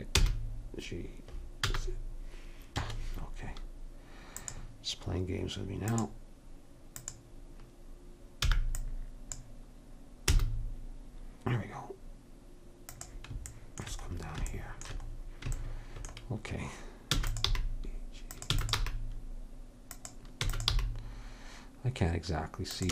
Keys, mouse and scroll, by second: 4.4-8.5 drag, 8.5 b, 10.3 g, 17.1 e, 17.5 g, 18.5 e, 18.8 g, 20.4 e, 20.8 g.